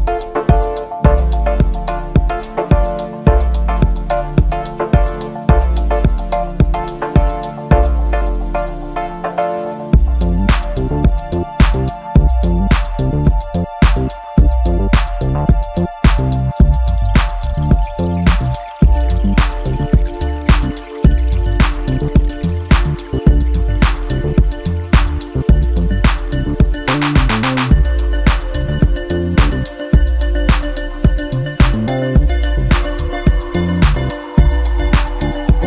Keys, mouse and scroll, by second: 0.2 KP_1, 0.9-2.7 scroll up 2, 2.7-7.5 drag, 10.0-13.1 drag, 13.9-15.1 middle drag, 15.1 s, 17.5 KP_7, 19.3 s, 21.9-23.1 scroll down 3, 23.1 KP_1, 24.6 g, 28.3-30.3 middle drag, 30.3-31.8 drag, 31.8-33.8 scroll up 1, 33.8 click, 34.8 f.